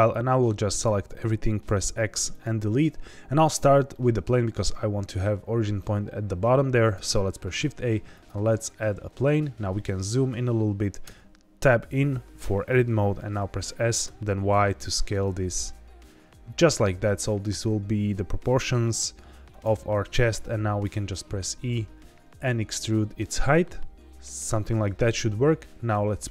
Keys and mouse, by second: 0.1-0.9 drag, 1.6 x, 3.9-4.2 middle drag, 6.9 shift+a, 11.0 Tab, 13.3 s, 14.0 y, 19.4 click, 20.8 e, 24.2 click, 26.2 click.